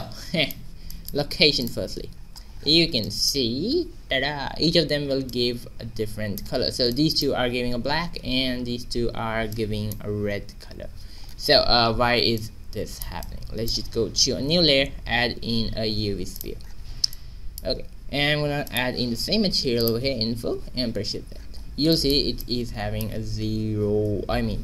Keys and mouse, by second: 1.6 click, 2.1-3.5 middle drag, 4.0 shift+z, 11.0 shift+z, 14.2 2, 14.8 shift+a, 21.3 shift+z, 21.8 middle click, 22.0-24.5 drag.